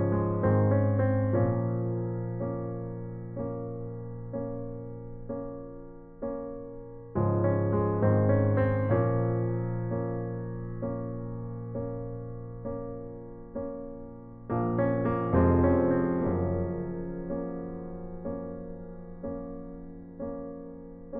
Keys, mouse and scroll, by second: 1.3 a, 1.9 c, 5.8-7.5 right drag, 7.2 shift+d, 8.1-9.9 drag, 11.7 a, 12.2 c, 15.8-17.5 right drag, 16.4 Delete, 17.5 right click, 18.5-19.6 right drag, 20.0 f.